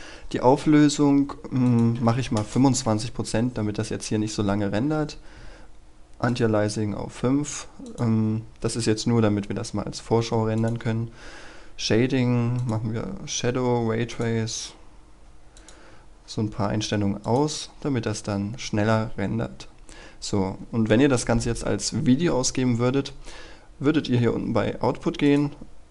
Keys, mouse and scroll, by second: 1.9 KP_2, 2.3 Return, 6.1 click, 7.0-7.7 scroll down 1, 7.7 click, 9.0-10.2 scroll down 1, 10.5 click, 18.2-20.4 scroll down 1, 25.1-25.9 drag.